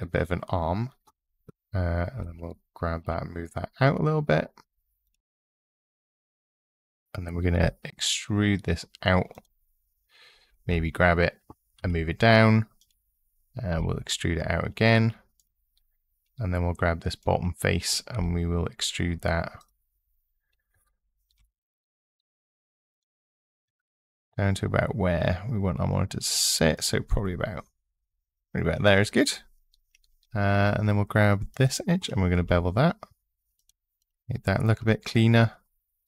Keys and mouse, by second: 1.9 g, 2.8 x, 4.8 click, 5.1 click, 7.3 e, 9.1 click, 10.4 g, 11.6 z, 12.6 click, 13.8 e, 15.1 click, 16.9 click, 17.9 e, 19.4-20.5 drag, 23.5 e, 30.4 2, 31.3 click, 32.2 ctrl+b, 33.3 click, 33.8 click.